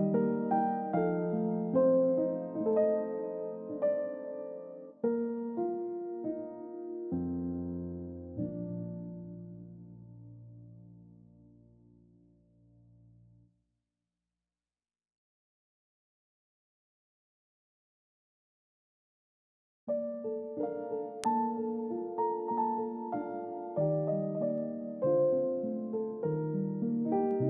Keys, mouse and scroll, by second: 3.2-3.6 scroll down 1, 3.6-3.9 scroll up 1, 4.8 middle click, 8.0 shift+click, 15.0 scroll down 1, 15.2 middle click, 15.7 scroll up 1, 20.2 scroll down 1, 20.6 scroll up 1, 22.6 shift+click.